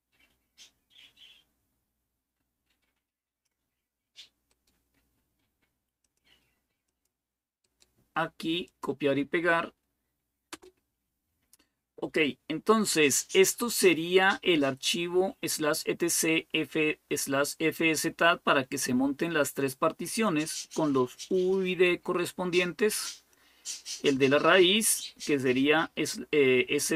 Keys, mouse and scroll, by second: 5.8 click, 6.7 click, 8.5 click, 10.3 Return, 20.8-26.9 drag.